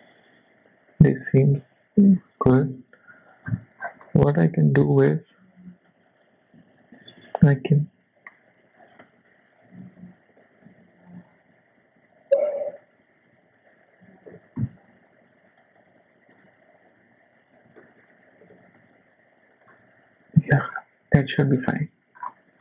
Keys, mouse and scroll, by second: 0.2 Tab, 0.9 Tab, 2.5 z, 3.5 click, 3.8 scroll down 4, 4.0 middle click, 5.1-5.6 scroll up 5, 5.9 KP_1, 6.3 Tab, 6.6 z, 8.0 click, 8.8 click, 10.4 g, 13.2 s, 14.3 g, 15.8 s, 16.9 click, 17.8 shift+middle click, 18.4 g, 20.4 Tab, 20.7 scroll down 2, 21.0 z, 21.4 scroll down 4, 21.7 middle click, 22.2-22.5 scroll up 3.